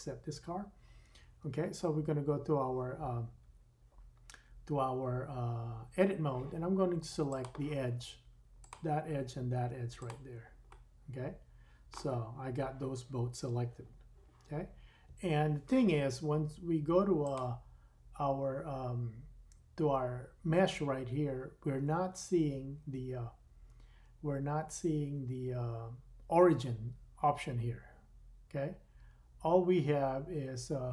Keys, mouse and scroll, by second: 0.0-1.7 scroll up 3, 1.7 Tab, 8.7 middle click, 9.7 shift+click, 9.9 shift+middle click, 10.1-17.2 shift+middle drag, 17.2-30.9 drag.